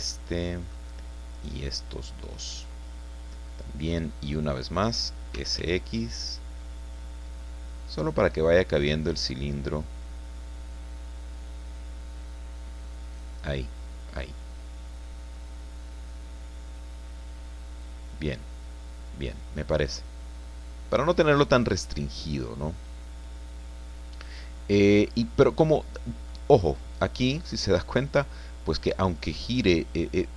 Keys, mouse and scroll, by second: 0.1 shift+middle click, 1.3 shift+right click, 2.3 shift+right click, 2.7-3.1 shift+scroll down 2, 3.4 click, 4.1-4.5 scroll up 2, 5.1-6.1 typing, 7.8 scroll down 2, 10.0-10.4 scroll down 2, 13.1 click, 13.6-23.1 middle drag, 23.1-25.4 drag, 25.9 scroll down 1, 26.3-27.7 drag, 29.1 scroll up 2, 29.5 click.